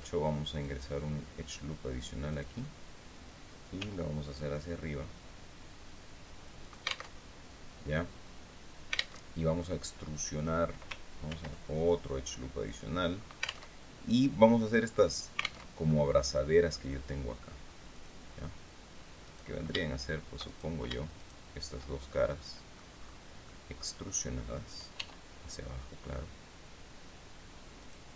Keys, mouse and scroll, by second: 0.1 click, 1.8 click, 3.2 g, 6.1 alt+click, 6.6 alt+Tab, 8.7 alt+Tab, 9.1-10.1 alt+drag, 10.7 ctrl+r, 11.2 ctrl+click, 12.1 click, 12.5-13.1 scroll up 2, 13.1 alt+Tab, 15.1 alt+Tab, 15.3-15.7 alt+scroll up 3, 17.4 click, 18.7 right click, 19.9 shift+right click, 20.6 shift+right click, 21.6 shift+middle click, 22.5 scroll down 1, 22.9 middle click, 24.4 e, 27.3 click.